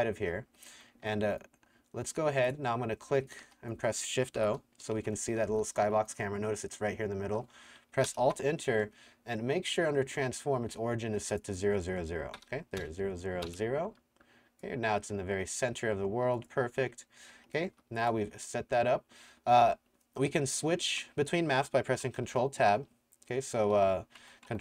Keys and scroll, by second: 0.0-1.2 typing, 3.4-6.3 typing, 8.1 alt+Return, 12.4 KP_0, 13.4 KP_Enter, 16.9 s, 17.7 w, 22.3 ctrl+Tab, 23.8 ctrl+Tab, 24.2 ctrl+Tab.